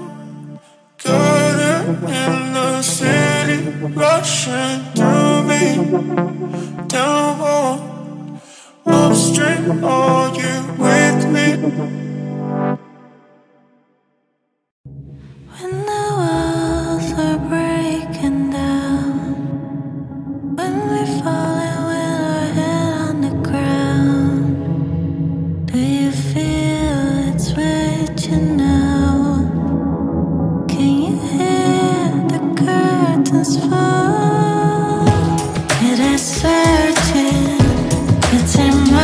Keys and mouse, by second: 0.4 x, 9.2 KP_2, 10.2 KP_Enter, 12.6 click, 14.1 middle click, 14.9 middle click, 15.0 click, 15.1 middle click, 16.6 z, 30.0 KP_3, 30.4 KP_Enter, 31.8 middle click, 34.7 ctrl+middle click.